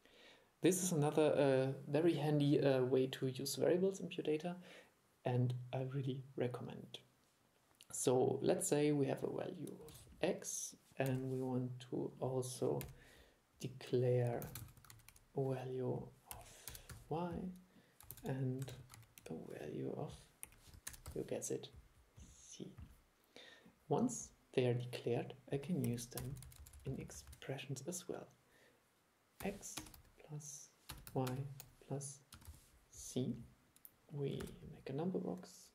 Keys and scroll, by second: 10.0 super+e, 14.6 super+c, 14.8 super+v, 18.2 super+c, 18.8 super+v, 34.5 super+3.